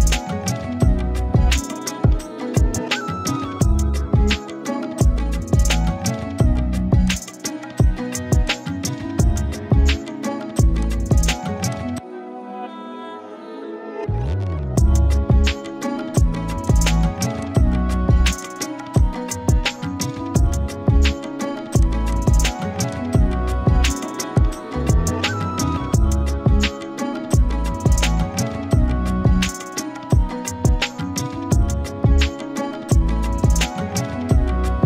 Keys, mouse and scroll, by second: 1.1 shift+Up, 7.1 click, 8.8-10.4 alt+drag, 10.6 z, 11.1-11.4 z, 11.7 click, 12.1-13.3 scroll up 1, 13.3 z, 15.2 click, 17.0-19.2 typing, 17.4 click, 17.9 click, 18.4 click, 19.0 click, 21.8 click, 24.2 space, 24.4-25.3 click, 24.8 space, 26.6 right click.